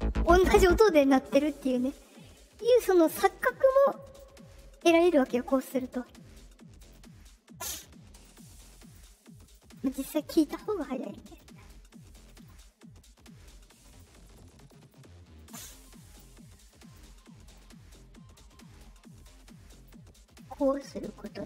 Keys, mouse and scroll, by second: 3.2 click, 3.9 click, 5.0 click, 5.6 click, 6.7 click, 8.1 click, 8.7 click, 9.3 click, 9.7 click, 10.6 click, 12.3 click, 13.8 click, 14.6 click, 15.3 click, 15.8 click, 16.6 click, 17.5-19.8 drag, 20.9 click.